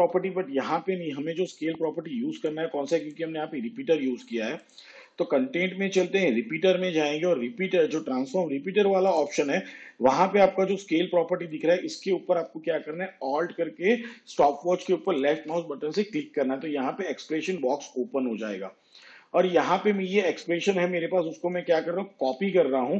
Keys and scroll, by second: 22.3 ctrl+c.